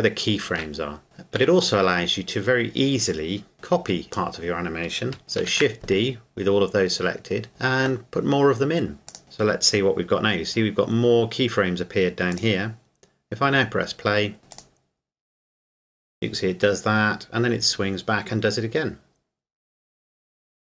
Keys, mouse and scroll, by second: 0.6 scroll up 1, 0.9 scroll, 1.0 a, 1.4 a, 3.5 click, 5.4 shift+d, 9.1 click, 9.2-10.2 scroll down 1, 12.3 click, 13.7 scroll down 1, 14.3 scroll up 1, 14.5 click.